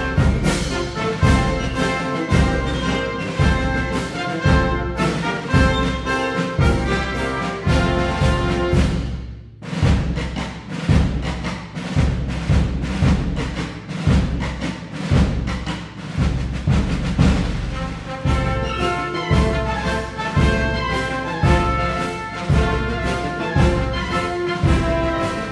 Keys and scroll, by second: 0.2 Tab, 0.4 Right, 0.5 Right, 0.8 Up, 1.0 Up, 1.1 Up, 1.3 Up, 1.6 Left, 4.6-6.2 typing.